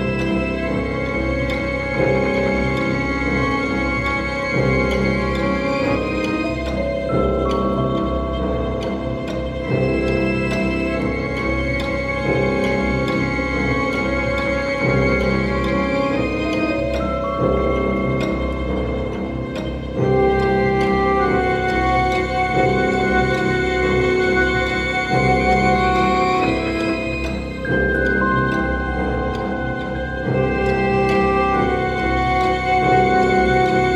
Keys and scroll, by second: 27.4 ctrl+0, 31.6 space.